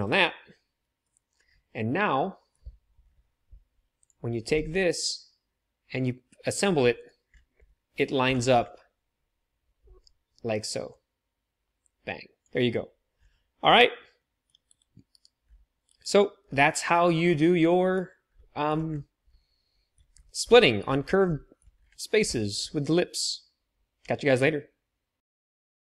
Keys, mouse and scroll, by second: 4.5 g, 7.6 middle click, 8.3-11.5 middle drag, 11.5-14.3 drag, 14.6 KP_3, 15.1 KP_1, 15.8 KP_3, 19.2-25.8 shift+drag.